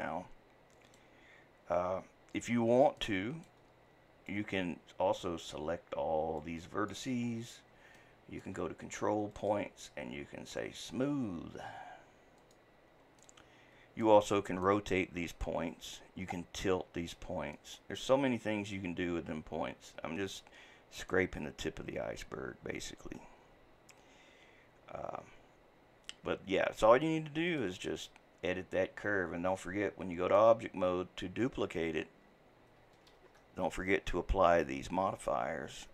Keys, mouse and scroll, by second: 1.8-3.0 scroll down 2, 3.0-4.3 middle drag, 4.3-5.7 drag, 5.7 scroll down 2, 6.4 click, 7.3 scroll up 2, 8.0-9.3 shift+middle drag, 9.3-13.2 drag, 13.2-15.0 middle drag, 15.0-17.6 scroll up 1, 17.6-20.6 middle drag, 27.5 click, 29.6-33.1 drag, 33.1 shift+d.